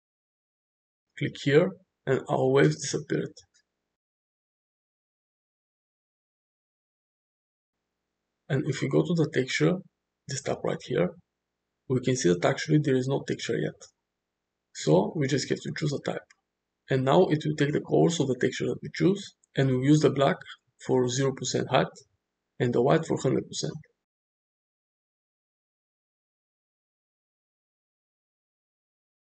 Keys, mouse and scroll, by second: 1.5 click, 2.4-2.8 middle drag, 4.2-4.6 middle drag, 5.3 shift+middle drag, 5.8 middle click, 8.1 click, 14.9-17.2 drag, 18.1-19.5 middle drag, 20.3-20.7 shift+middle drag, 20.9-23.2 middle drag, 23.2 click, 23.8 click, 23.9-25.0 middle drag, 28.1-29.2 drag.